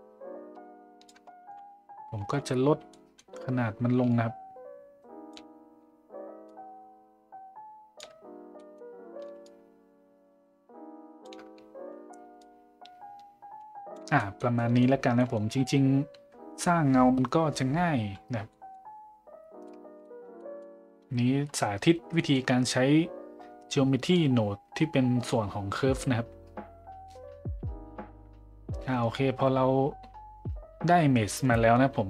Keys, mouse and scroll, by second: 2.2 z, 2.9 middle click, 4.1-5.3 shift+drag, 6.5-8.0 shift+drag, 8.6 middle drag, 9.4-11.3 shift+drag, 12.4-14.0 shift+drag, 14.2 middle drag, 14.5 middle drag, 15.2 middle drag, 18.5 middle drag, 19.6-19.9 middle drag, 20.4 middle drag, 22.2 middle click, 24.2-25.3 drag.